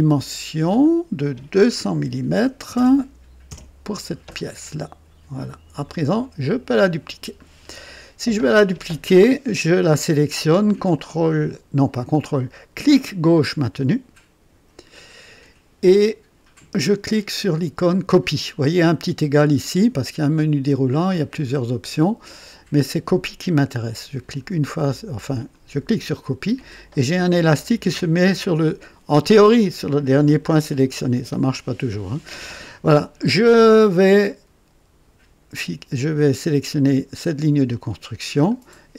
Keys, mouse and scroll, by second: 0.6 click, 2.0 KP_2, 2.3 KP_0, 3.4 Return, 5.8 click, 7.5-7.8 scroll down 2, 7.9 right click, 10.9-12.2 drag, 12.8-14.7 drag, 21.0 click, 24.2 click, 25.4 click, 38.4 click.